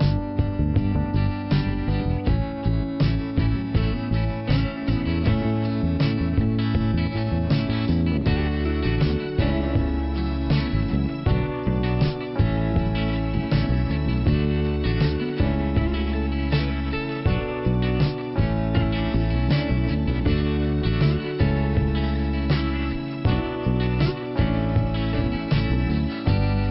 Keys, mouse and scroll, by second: 1.3 click, 3.1 click, 3.1 click, 3.6 right click, 4.3 click, 6.0 click, 7.5 click, 8.5 click, 17.2 click, 17.8 click, 18.6 click, 22.9 click, 23.7 scroll up 1, 24.1 click, 25.7 click.